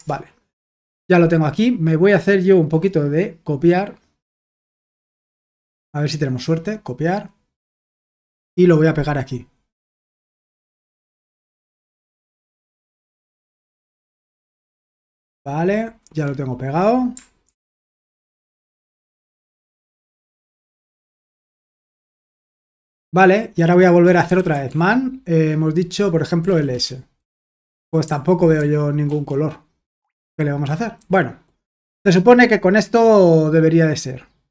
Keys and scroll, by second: 9.9 i, 13.8 ctrl+alt+v, 16.0 Escape, 17.2-18.2 typing, 20.3 Return, 20.9-22.2 typing, 24.0-25.0 typing, 26.1-26.9 typing, 28.0 ctrl+d, 28.6 ctrl+d, 29.0 ctrl+d, 31.0 ctrl+i.